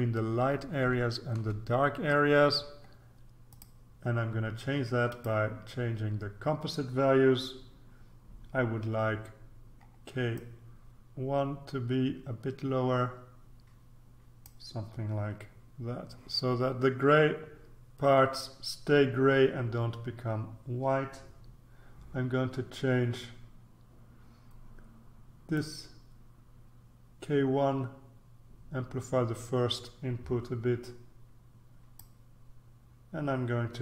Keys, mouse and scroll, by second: 1.0-1.6 ctrl+scroll up 1, 1.6 ctrl+scroll up 1, 3.5 click, 5.1 click, 10.3-15.0 drag, 25.5-32.5 drag.